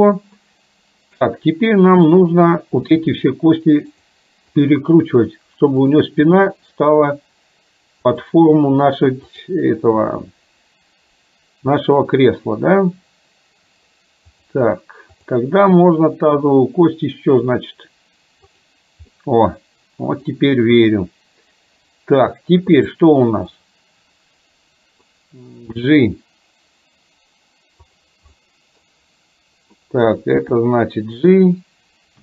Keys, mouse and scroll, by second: 2.1 click, 3.0 r, 4.5 click, 5.2 r, 6.5 click, 6.9 r, 9.5 click, 10.1 r, 15.2 click, 15.7 r, 19.1-20.2 middle drag, 22.7 click, 23.6-25.1 middle drag, 25.7 g, 28.4 middle click, 30.5 g.